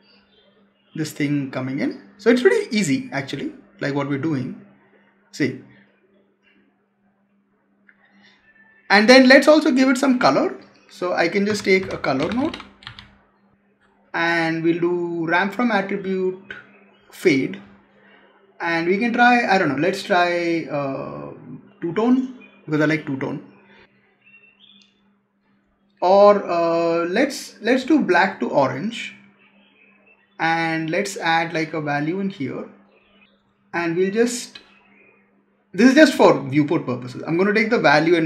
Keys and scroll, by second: 11.4 Tab.